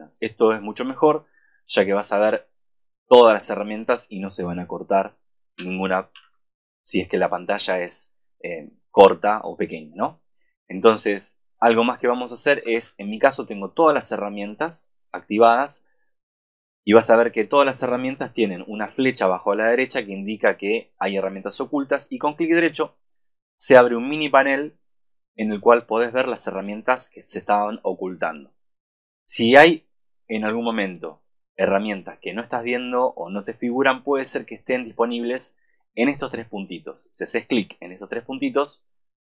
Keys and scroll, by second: 6.3 super+-, 12.6 super+=.